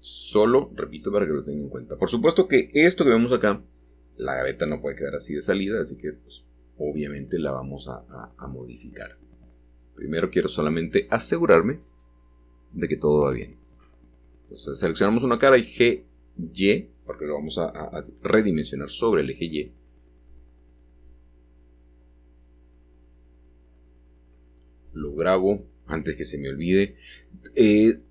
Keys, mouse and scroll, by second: 0.0 click, 2.3-4.7 shift+middle drag, 4.8-6.0 scroll up 1, 8.3-12.3 middle drag, 12.3 click, 13.3-16.2 middle drag, 19.5 shift+click, 20.3 middle click, 20.5 middle click, 20.6 middle click, 20.7 click, 21.4-22.3 scroll down 2, 27.7 Return.